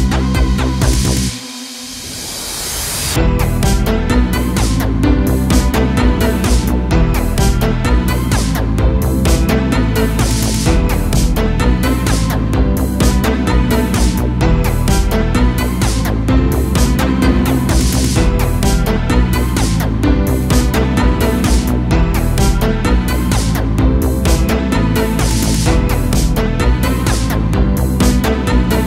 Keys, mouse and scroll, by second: 0.2 click, 0.8-1.9 middle drag, 1.9 g, 2.8-3.9 middle drag, 3.9 KP_0, 4.5 a, 4.7 a, 5.6-7.2 shift+middle drag, 7.2 l, 7.9 g, 9.6 middle click, 10.3 scroll up 1, 10.6 g, 11.4 a, 11.5 a, 12.1 KP_0, 12.4 Tab, 13.9 ctrl+1, 15.2 right click, 15.9-16.7 scroll up 1, 16.7-18.2 scroll up 1, 18.2 click, 18.9 Tab, 19.4 a, 20.0 alt+s, 21.3 a, 21.5 a, 21.7 Tab, 22.2-22.8 scroll down 2, 22.8-23.4 shift+middle drag, 23.4-23.7 scroll down 2, 23.7 a, 23.9 a, 24.6-25.1 scroll up 1, 25.1-25.5 shift+middle drag, 25.5-27.4 scroll up 6, 27.5 click, 27.9 Tab.